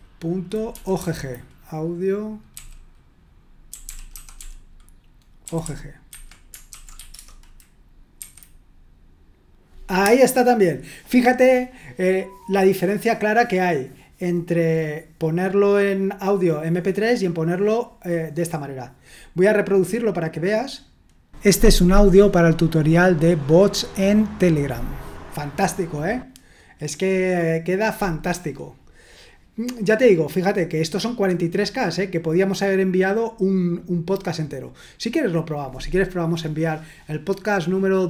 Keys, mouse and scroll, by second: 0.7 Down, 1.0 Down, 2.5-7.2 typing, 6.1 Escape, 8.1 F5, 20.7 click, 35.2 click.